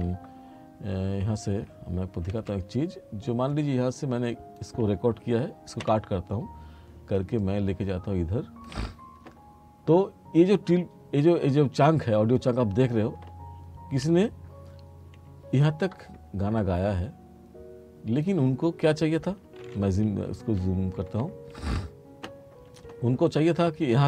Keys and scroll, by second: 2.4 F7, 3.6 F6, 5.9 b, 20.7 t, 21.6 r.